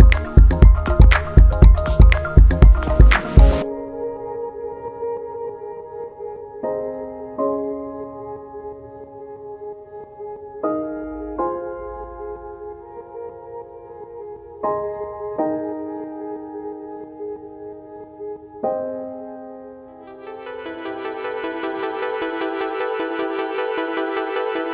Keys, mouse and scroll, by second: 0.4 click, 0.5 double click, 2.5-6.0 typing, 6.4 Return, 6.4 scroll down 2, 7.4 click, 8.9 click, 9.0 double click, 9.7-10.8 typing, 11.4 right click, 12.6 click, 13.9 click, 14.0 double click, 14.6-15.8 typing, 16.4 Return, 19.0 scroll up 2, 19.6 click, 20.6 click, 21.6-22.5 scroll down 5, 21.9 middle click, 22.1 middle click, 22.3 middle click, 23.0 click, 24.4 click.